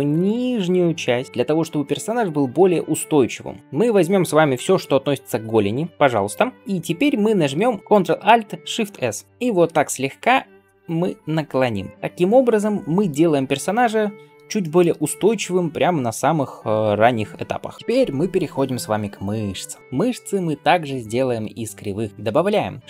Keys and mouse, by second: 0.2-8.1 drag, 4.7 ctrl+l, 5.9 g, 6.6 KP_3, 9.3 ctrl+alt+shift+z, 9.3 ctrl+alt+s, 9.6-22.8 middle drag, 22.8 shift+a.